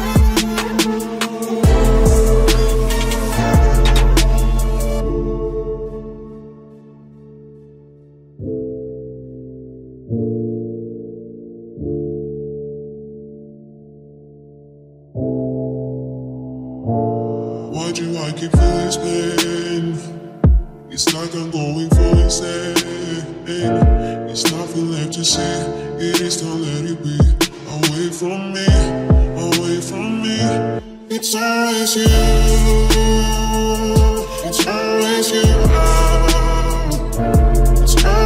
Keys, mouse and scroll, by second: 0.0 Tab, 1.9 KP_1, 2.3 z, 2.8 Tab, 2.8 KP_1, 2.8 z, 4.3 KP_Decimal, 5.5 r, 8.8 e, 9.9 r, 11.8 r, 14.2 r, 14.8 Tab, 15.2 z, 17.4 KP_3, 18.2 Tab, 18.5 a, 18.8 a, 19.5 ctrl+n, 19.8 Tab, 21.0 z, 22.3 z, 22.9 Tab, 24.4 f, 24.6 Tab, 25.0 z, 27.5 z, 29.0-31.6 middle drag, 30.9 KP_3, 31.6 z, 32.2-34.3 middle drag, 35.8 a, 36.5 z, 36.8 Tab, 37.2 Tab, 37.4 click, 37.6 Tab, 38.0 z.